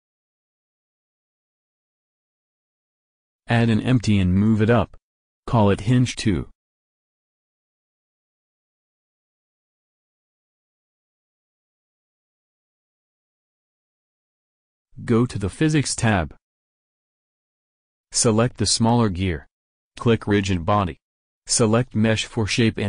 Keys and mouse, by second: 3.4 shift+a, 7.3 s, 8.1 g, 9.8-11.6 drag, 15.9-19.4 drag, 19.9-21.4 drag, 21.4 middle click, 21.8-22.8 drag.